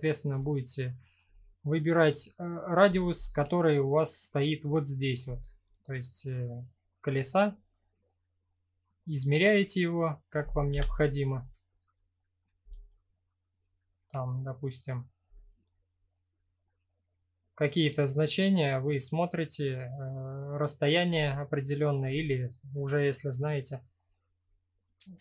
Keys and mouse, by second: 2.9-4.2 shift+drag, 5.2 click, 10.3 KP_1, 12.5-13.7 shift+right drag, 15.2-20.4 shift+drag, 22.4-23.5 middle drag.